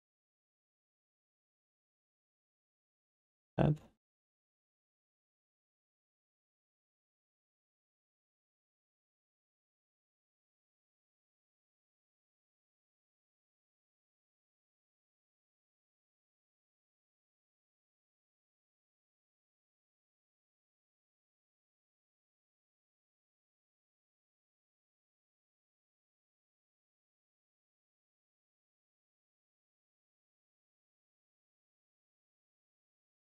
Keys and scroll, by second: 1.7 1.